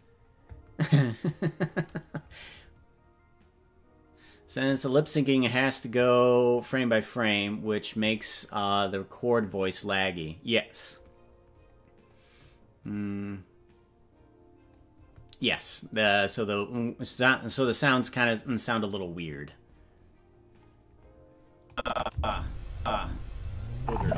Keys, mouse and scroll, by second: 21.7 click, 22.1 space, 22.8 click.